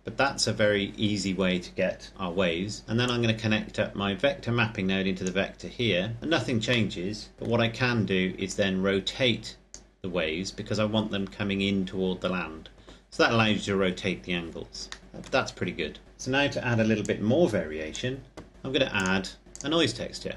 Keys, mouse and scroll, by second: 3.3 click, 7.1 middle click, 8.5 click, 15.0 middle click, 17.1 click.